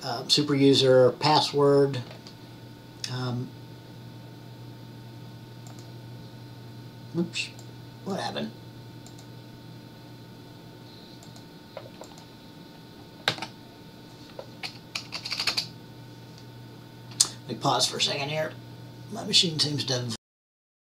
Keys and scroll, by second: 13.5 typing, 15.3 typing.